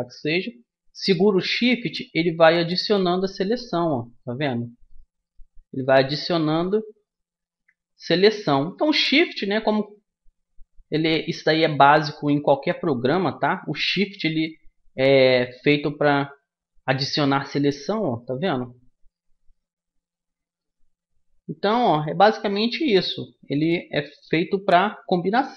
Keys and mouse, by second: 1.6 middle click, 1.8-25.5 right drag.